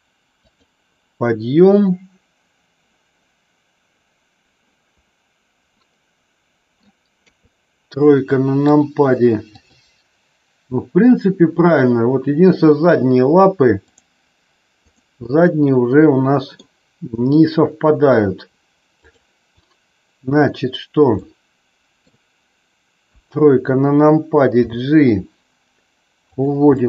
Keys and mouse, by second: 0.4 click, 5.8-6.8 middle drag, 7.1 KP_3, 8.7 click, 9.4 click, 14.8 click, 15.4-16.5 middle drag, 17.0 KP_3, 21.1 middle click, 23.0 KP_3, 24.7 g, 26.8 middle click.